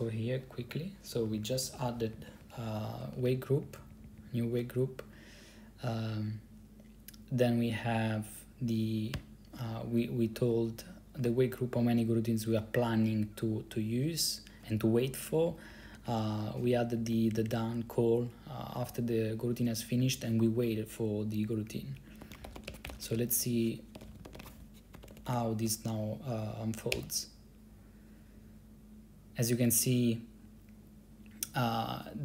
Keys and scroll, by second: 1.3 Down, 1.4 Down, 1.5 Down, 1.6 Down, 1.8 Down, 1.8 Down, 2.0 Down, 2.1 Down, 2.2 Down, 2.4 Down, 2.5 Down, 2.7 Down, 2.8 Down, 3.2 Up, 3.3 Up, 3.8 Right, 3.9 Right, 4.1 Right, 4.2 Right, 4.3 Right, 9.3 Down, 15.8 Down, 16.0 Down, 16.1 Down, 16.1 Down, 16.3 Down, 16.7 Up, 17.1 Right, 17.2 Right, 17.5 Right, 20.1 Down, 20.2 Down, 20.4 Down, 22.3-25.6 typing, 27.0 Return.